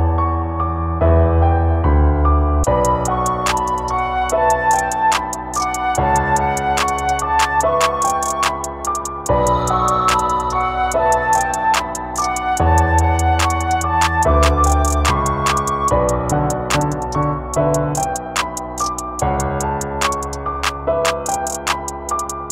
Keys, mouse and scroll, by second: 2.7 click, 5.2 x, 7.6 right click, 10.3 click, 12.4 click, 13.6 click, 16.0 click, 18.0 click, 21.2 shift+a, 21.9 click, 22.3 shift+a.